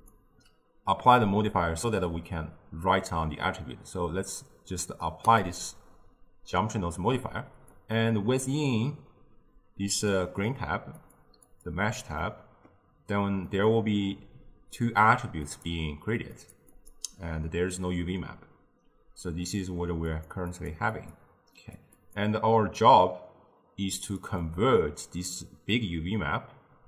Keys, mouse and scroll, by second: 0.0-3.1 drag, 7.8 click, 11.0-12.3 drag, 12.3-13.5 middle drag, 13.5-19.8 drag, 20.2 click, 20.6 click, 21.0 click, 21.7 click, 22.0 click, 24.2-26.8 drag.